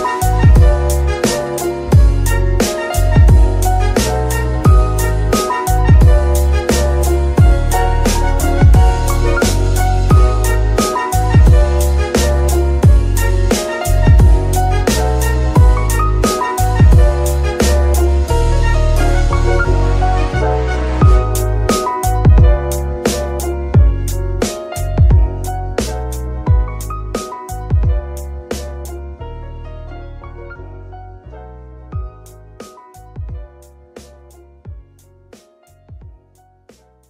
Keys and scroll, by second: 2.8 shift+KP_3, 4.8 shift+d, 6.7 Tab, 7.3 shift+s, 8.3 Tab, 8.6 shift+s, 10.2 g, 10.3 y, 18.5 g, 18.6 x, 25.9 F2, 26.7 BackSpace, 26.9 BackSpace, 27.0 BackSpace, 27.7 Left, 27.8 Left, 28.2 BackSpace, 28.4 BackSpace, 28.5 BackSpace, 28.6 BackSpace, 29.7 b, 29.8 i, 30.1 g, 30.5 Return, 31.5 KP_3.